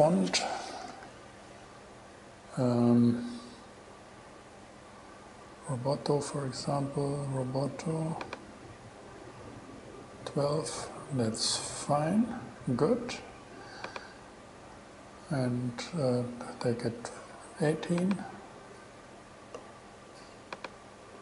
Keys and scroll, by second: 1.1 super+t.